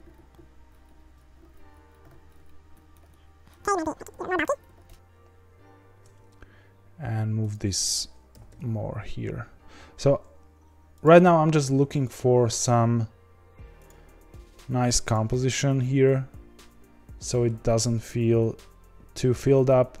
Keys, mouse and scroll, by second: 0.0 ctrl+b, 0.8 click, 0.9 1, 1.1 click, 1.3 g, 1.7 click, 1.9 click, 2.0 g, 2.4 click, 2.7 middle click, 2.9 scroll down 2, 3.0 Tab, 3.1-3.5 middle drag, 3.5 scroll up 1, 3.6 Tab, 3.8 a, 4.0 s, 4.6 scroll down 2, 4.7 Tab, 4.9 KP_0, 7.5 click, 8.3 g, 13.8 click, 15.1 click, 17.1-18.0 scroll down 5, 18.0-20.0 scroll down 1.